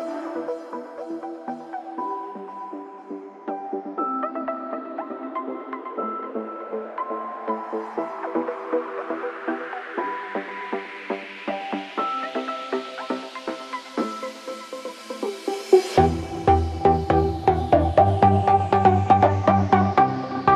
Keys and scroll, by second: 6.7 ctrl+d, 11.0 ctrl+=.